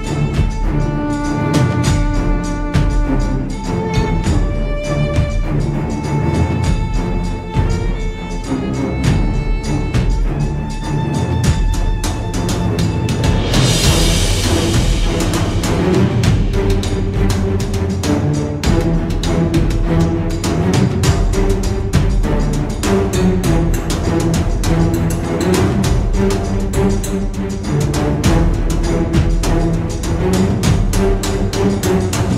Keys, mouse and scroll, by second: 1.7 middle click, 2.5 scroll up 1, 2.7-3.4 scroll down 1, 3.4 click, 4.7-8.5 drag, 10.0 click, 14.1 F2, 15.3 click, 15.9-16.3 ctrl+scroll up 2, 17.0 click, 19.1 click, 21.0 click, 22.3 F1, 23.0-23.5 ctrl+scroll down 2, 24.1 ctrl+click, 25.4-27.0 drag, 27.4 ctrl+scroll up 2, 28.0 ctrl+click, 29.6 click, 32.3 click.